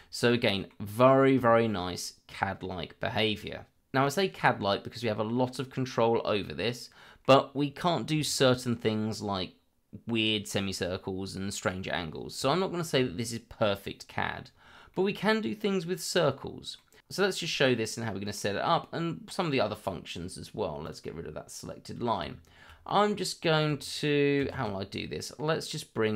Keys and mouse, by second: 0.3-0.7 middle drag, 1.4 shift+middle drag, 4.7-5.0 middle drag, 6.0-7.2 middle drag, 7.5 middle drag, 8.2 shift+middle drag, 14.9 middle click, 16.2-17.0 middle drag, 17.5 shift+middle drag, 18.6-19.1 middle drag, 20.9 click, 22.9-23.6 middle drag, 24.4 shift+a.